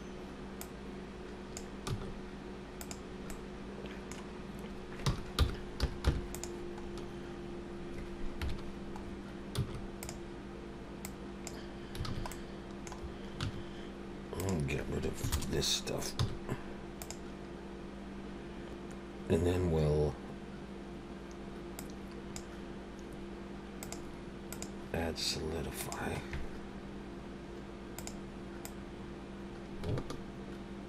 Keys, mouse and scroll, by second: 0.6 click, 1.9 s, 3.3 middle click, 5.1 r, 6.8-8.1 scroll up 2, 8.4 KP_Decimal, 9.0-9.6 scroll down 4, 9.6 s, 11.0 click, 12.1 alt+a, 12.3 middle click, 13.4 1, 14.3 click, 15.5 ctrl+KP_Add, 16.2 x, 18.4 ctrl+z, 18.4 Tab, 21.8 click, 23.8 click, 24.5 click, 28.0 click, 28.6 click.